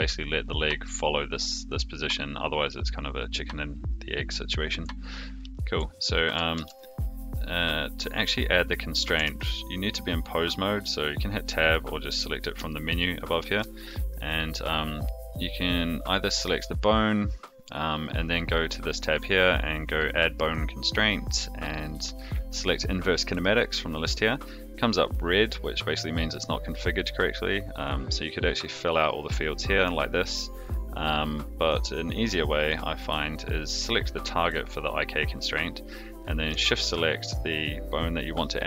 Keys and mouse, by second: 6.5 ctrl+z, 9.1 Tab, 12.6 shift+middle drag, 13.2-13.5 middle drag, 18.8 click, 19.8-23.4 drag, 33.6 click, 36.8 shift+click.